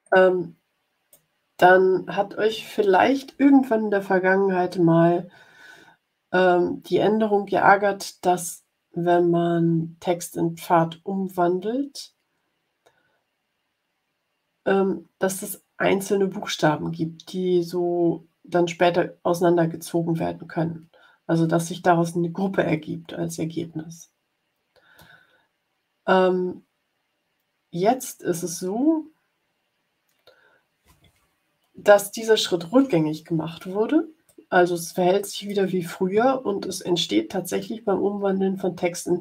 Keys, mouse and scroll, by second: 26.4 scroll down 2, 27.6-28.4 scroll down 3, 28.8-29.5 scroll up 2, 32.0-32.3 ctrl+scroll up 2, 34.2-35.6 drag.